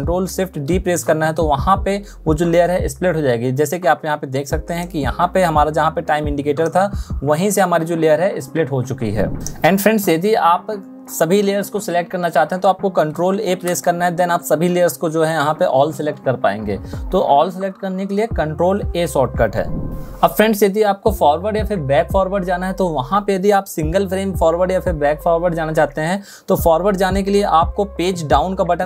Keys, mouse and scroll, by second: 12.9 ctrl+a, 27.8 Page_Down.